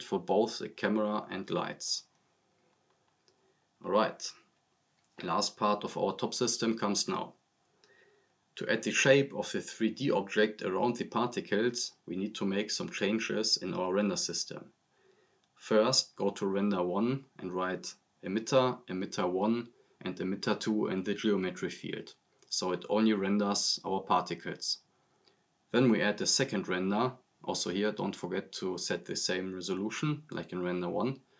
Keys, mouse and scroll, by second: 4.8 click, 6.0 click, 10.7-17.1 typing, 23.2 click, 25.8-26.8 typing, 27.1 click, 31.2 click.